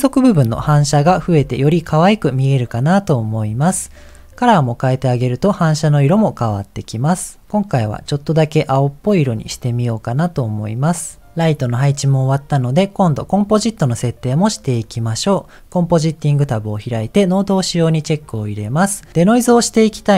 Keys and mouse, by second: 0.4 h, 1.1 ctrl+z, 15.1 click, 17.7 click, 18.9 middle click.